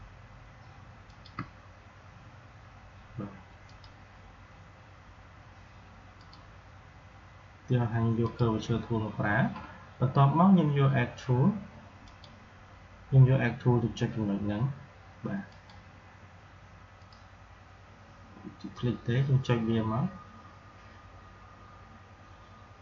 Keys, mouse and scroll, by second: 6.0 click, 11.9 click, 15.4-22.8 drag.